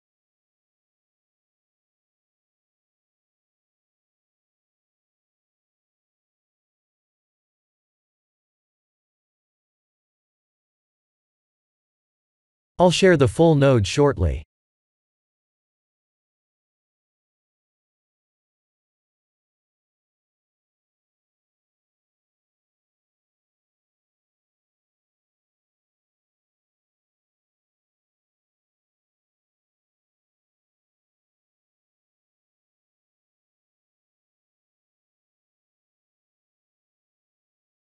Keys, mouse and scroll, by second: 1.3 click, 3.8 click, 4.8 middle click, 7.4 middle click, 7.9 click, 9.7 middle click, 9.7 click, 11.4 KP_0, 13.1 middle click, 17.0 click, 20.5 click, 23.5-24.9 scroll down 8, 24.9 click, 24.9 scroll down 3, 25.6 ctrl+space, 26.3-27.2 scroll down 6, 27.4 shift+middle click, 29.7-30.4 scroll down 4, 31.1 click, 34.9 click, 36.9 click.